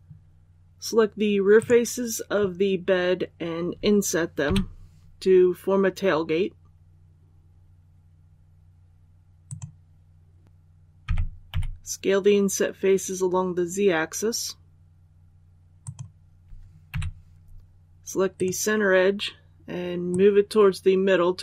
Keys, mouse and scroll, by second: 1.5 right click, 4.3 i, 9.3 click, 10.4 ctrl+z, 10.9-11.4 typing, 15.7 click, 16.8 2, 18.2 right click, 20.0-21.4 drag.